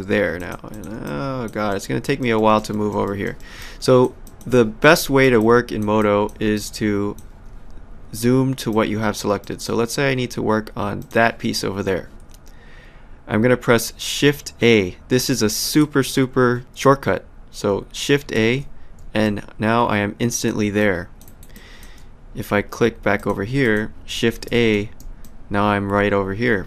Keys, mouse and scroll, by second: 0.4 click, 1.0 alt+click, 1.7 alt+middle click, 3.6 alt+click, 4.5 alt+middle click, 5.0 alt+right click, 5.4 alt+click, 8.7 alt+click, 11.0 click, 18.4 shift+a, 19.2 alt+click, 20.8 alt+click, 21.2 alt+right click, 21.6 alt+click, 23.2 click, 24.5 shift+a, 25.2 alt+click.